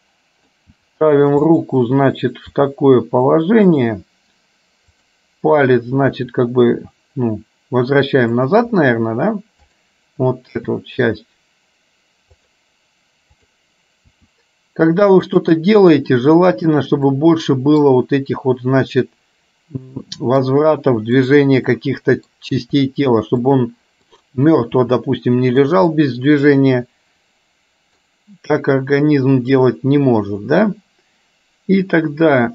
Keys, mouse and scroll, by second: 0.9 g, 2.7 r, 5.0 click, 6.3 r, 10.8 r, 14.3 r, 17.3 middle click, 20.2 middle click, 21.8 middle click, 22.8 r, 24.3 click, 24.8 r, 25.9-28.2 middle drag.